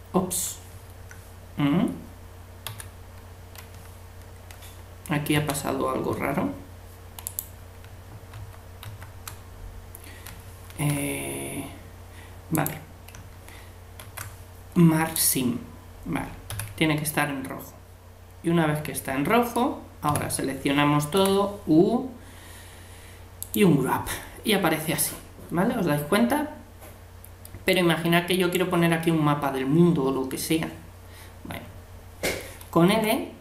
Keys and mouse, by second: 2.7 a, 5.4 Tab, 8.3 ctrl+z, 8.8 ctrl+z, 10.7 ctrl+e, 14.0 ctrl+e, 16.5 a, 17.1-18.9 middle drag, 20.1 a, 21.2 u, 27.7-29.5 drag, 32.9 l.